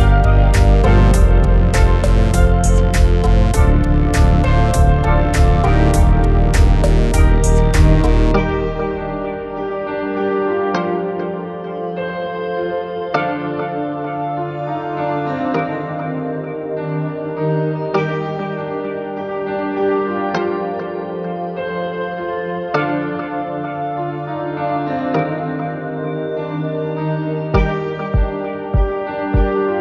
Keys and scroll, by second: 8.3 1, 13.8-16.6 typing, 18.3 m.